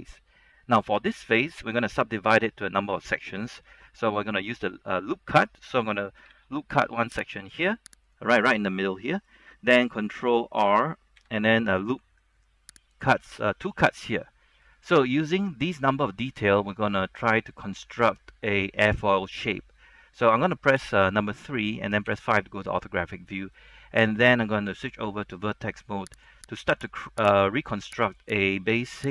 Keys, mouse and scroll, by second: 0.1-0.6 scroll up 1, 0.6 middle click, 1.1 scroll down 1, 1.3 middle click, 6.4 ctrl+r, 7.5 click, 8.2 right click, 8.8-9.9 middle drag, 10.4-10.9 scroll up 1, 11.3 ctrl+r, 12.1-12.5 scroll up 1, 12.5-13.1 scroll down 1, 13.1 click, 14.0 middle click, 15.5 shift+middle click, 20.9 KP_3, 22.2 KP_5, 23.7-24.3 scroll up 1, 24.3-24.7 scroll down 1, 24.8 ctrl+Tab, 26.3 click, 26.8 right click, 28.3 click.